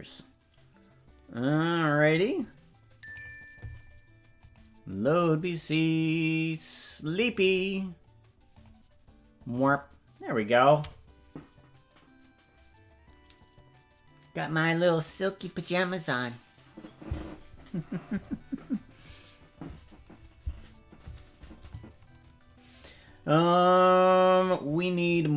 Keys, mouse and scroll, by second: 23.7 right click.